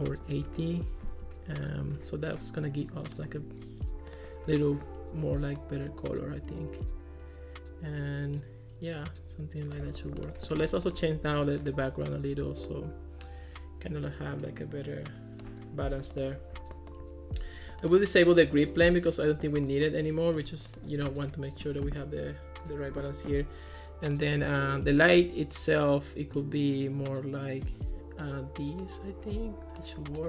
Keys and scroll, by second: 0.0-0.7 typing.